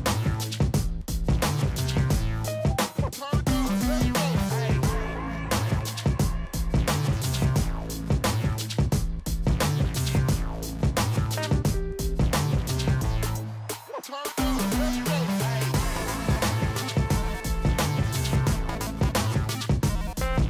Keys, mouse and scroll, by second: 0.1 Down, 0.6 Left, 0.9 Down, 3.2 Down, 3.5 Up, 3.6 Right, 5.1 Right, 5.6 ctrl+j, 7.1 Down, 7.6 Left, 7.8 Left, 8.0 Left, 8.1 Up, 8.3 Up, 8.5 Up, 8.7 Up, 8.8 Left, 9.5 Left, 9.8 Up, 11.6 ctrl+j, 13.0 Left, 13.2 Up, 13.8 Left, 13.9 Up, 14.4 Up, 14.5 Left, 16.5-17.3 scroll down 1, 17.3-17.7 scroll down 1, 17.7 ctrl+j, 19.1 Up, 19.1 Left, 19.3 Up, 19.7 Left, 19.8 Up, 20.3 Left.